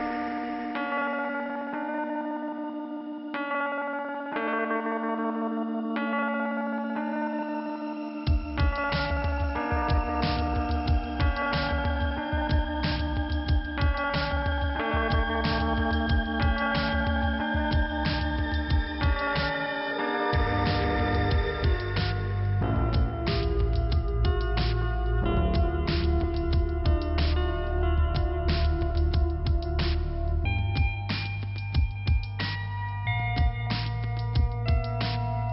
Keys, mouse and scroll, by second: 0.5 scroll down 1, 1.8 scroll down 1, 1.9 click, 2.8-3.5 scroll up 1, 3.5 click, 4.0 click, 5.5-6.1 scroll up 2, 6.3 click, 6.8 click, 8.7-10.8 scroll down 1, 11.1-11.8 scroll up 2, 14.4 click, 15.7 click, 16.5 middle click, 17.5 click, 21.5 click, 22.2 middle click, 26.0 click, 26.6 middle click, 27.7 click, 30.8 middle click, 32.6 scroll down 2, 33.9 scroll up 1, 34.6 click, 34.6 scroll up 1.